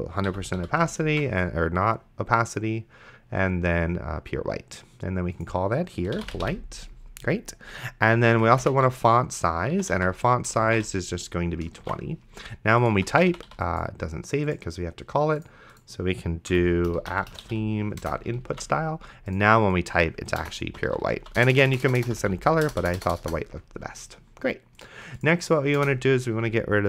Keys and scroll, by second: 0.3 End, 0.6 ;, 1.3 ctrl+s, 6.0-7.0 typing, 8.1-11.4 typing, 12.1 ctrl+s, 13.0 d, 16.5 Left, 17.2 p, 17.6 t, 18.0 Return, 18.8 ctrl+s, 20.4-22.7 typing, 25.8 Return.